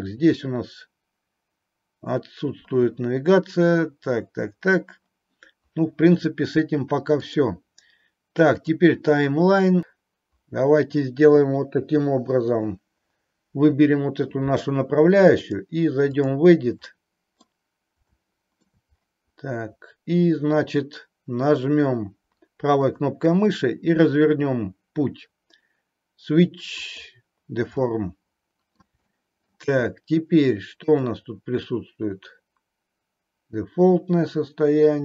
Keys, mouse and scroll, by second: 7.1-8.8 drag, 15.4 click, 16.9 middle click, 18.0 middle click, 22.8-27.8 right drag, 27.8-28.8 middle drag, 29.0-29.4 middle drag, 30.9-35.0 drag.